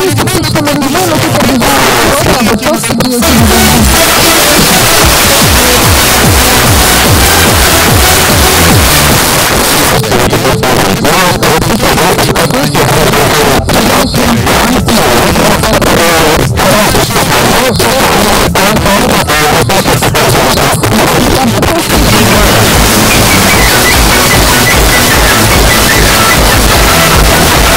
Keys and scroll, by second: 9.2 Page_Down.